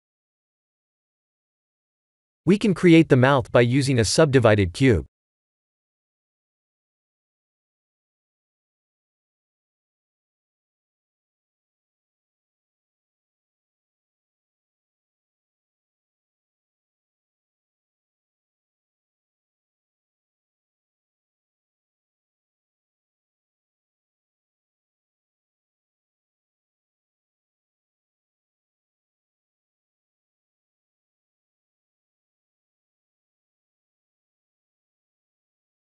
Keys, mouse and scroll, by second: 1.5 click, 3.0 shift+a, 7.2 scroll down 4, 7.7 shift+middle click, 8.3-8.9 scroll up 5, 10.5 scroll down 1, 11.2 scroll down 2, 11.9-12.3 scroll up 5, 12.3 ctrl+3, 13.0 Tab, 13.3 middle click, 13.7 scroll down 2, 13.9 3, 14.0 click, 14.4 middle click, 15.4 shift+click, 15.8 middle click, 16.3 scroll down 2, 17.1 click, 17.1 scroll down 1, 18.0 click, 18.1 shift+click, 19.0 ctrl+z, 19.5 s, 20.6 ctrl+z, 21.1 ctrl+r, 22.5 middle click, 23.2 3, 23.5 click, 24.0 middle click, 24.9 shift+click, 25.2 middle click, 26.1 s, 30.4 click, 32.3 scroll down 4, 33.4-33.9 scroll down 1, 33.9 KP_1, 35.4 click.